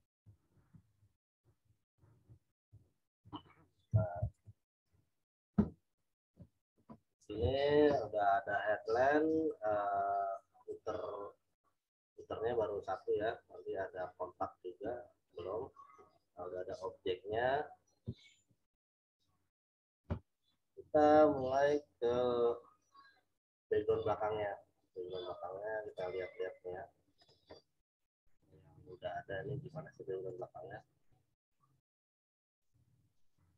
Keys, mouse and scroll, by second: 0.7 Return, 0.9 Right, 2.6 Up, 3.2 Left, 3.9 z, 4.3 alt+click, 18.3 z, 18.9 click, 25.8 click, 27.2 click.